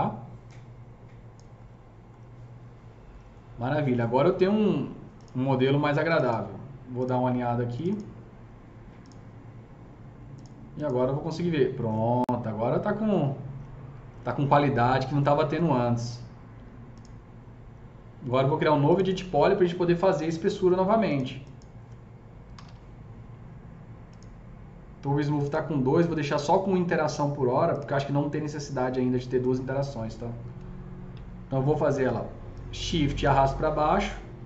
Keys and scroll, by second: 22.2-23.0 typing, 34.3 s.